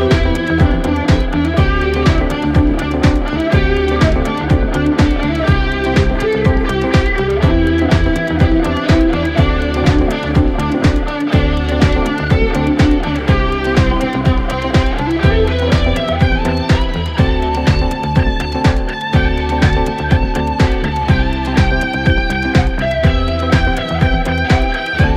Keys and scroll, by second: 7.0 ctrl+z, 7.6 Escape, 21.3 Escape.